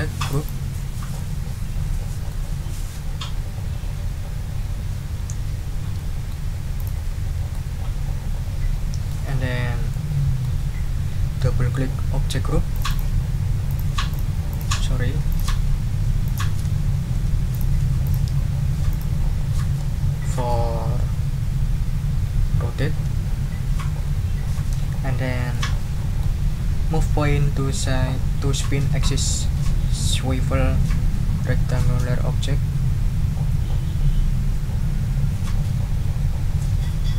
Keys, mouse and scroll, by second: 0.3 click, 1.1-2.5 drag, 5.9 ctrl+click, 6.8 click, 7.5-9.3 drag, 9.4 ctrl+scroll down 2, 9.9 ctrl+middle click, 10.3 click, 12.7 click, 13.7 click, 14.1 click, 14.5 click, 15.3 ctrl+click, 16.2 shift+click, 17.1 ctrl+g, 17.5 ctrl+click, 18.0 ctrl+click, 18.9 click, 25.5 click.